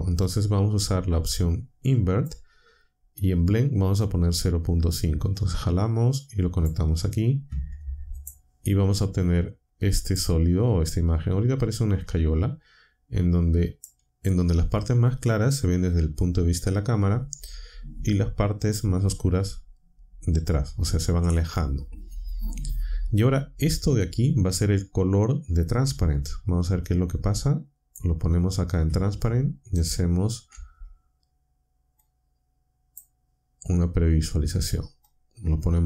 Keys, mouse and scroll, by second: 1.4 click, 5.2-6.8 drag, 8.1 ctrl+shift+click, 10.1-13.9 drag, 26.8-28.1 drag, 29.8 ctrl+shift+click, 32.0-33.1 drag, 35.0-35.8 drag.